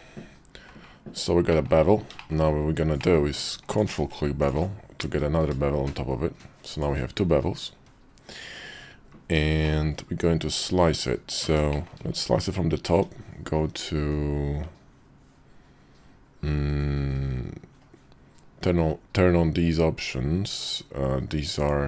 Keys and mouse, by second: 1.3 middle click, 2.0 shift+middle click, 2.7 middle click, 3.4 click, 3.6 q, 8.5 KP_5, 9.4 middle click, 11.5 middle click, 12.7 d.